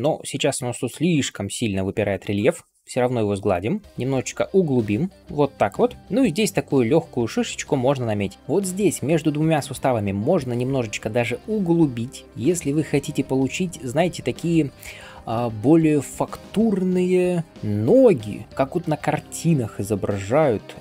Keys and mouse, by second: 3.5-12.2 middle drag, 20.6 shift+click.